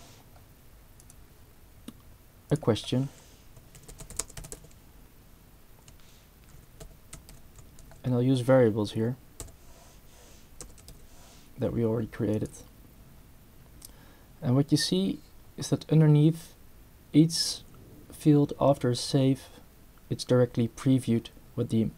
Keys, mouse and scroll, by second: 0.0-0.2 typing, 1.0 click, 2.5 click, 3.5-5.0 typing, 6.3-8.3 typing, 9.4 b, 10.6 space, 10.9 /, 12.3 click.